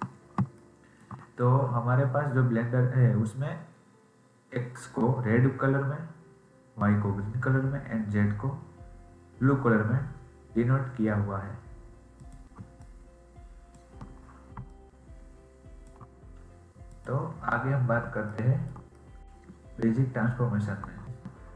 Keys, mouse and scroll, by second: 0.0-0.3 scroll down 2, 0.5-3.5 shift+middle drag, 12.1 click, 14.6-18.2 ctrl+drag, 18.2-20.0 shift+middle drag.